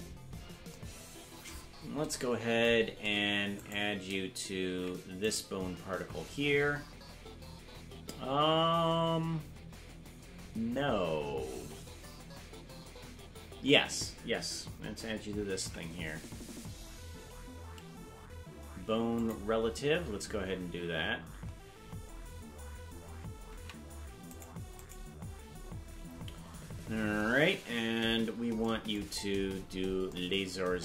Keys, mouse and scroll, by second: 0.0-0.5 scroll down 4, 1.7 scroll up 4, 3.7 shift+right click, 4.7 ctrl+Tab, 5.5 right click, 10.8 scroll down 4, 15.5 ctrl+p, 21.4-22.9 scroll up 8, 23.6 ctrl+Tab, 24.4 right click, 24.9 right click, 29.1-29.9 scroll down 14.